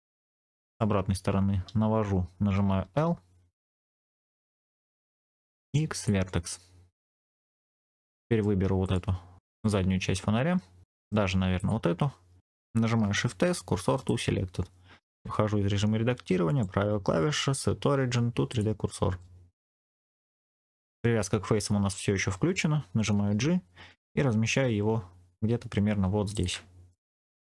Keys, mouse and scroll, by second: 2.7 l, 3.8 shift+middle click, 4.3 middle click, 5.2 x, 7.6 middle click, 8.7 click, 9.4 3, 9.5 click, 10.7 middle click, 11.5 click, 12.9 shift+s, 15.1 Tab, 16.4-19.1 drag, 16.4 right click, 19.1 middle click, 20.2-20.8 scroll down 3, 23.1 g, 26.2 ctrl+click, 26.8-27.5 middle drag.